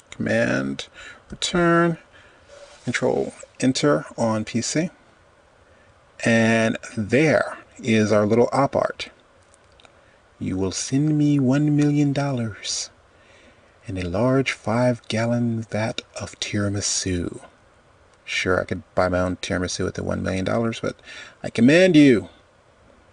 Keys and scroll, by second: 0.1 super+Return.